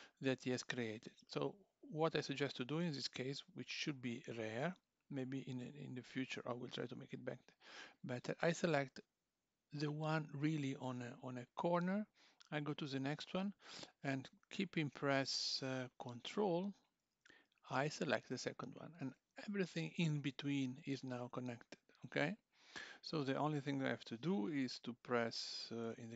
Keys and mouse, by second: 0.9 click, 3.0 2, 3.7 1, 4.6 2, 5.0 click, 18.3 ctrl+click, 25.9 F3.